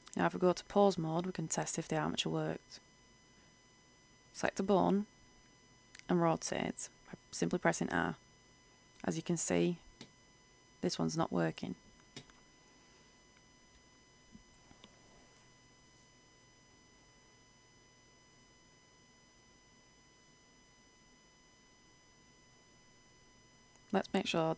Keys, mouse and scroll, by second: 0.3 click, 3.6 right click, 5.7 r, 9.6 click, 9.9 ctrl+z, 10.3 right click, 17.1-20.8 middle drag, 21.5 right click.